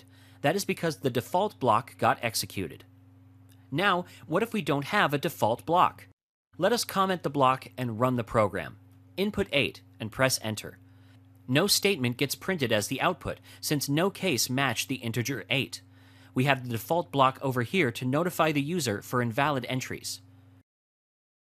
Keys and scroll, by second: 6.5 F6, 7.5 F5.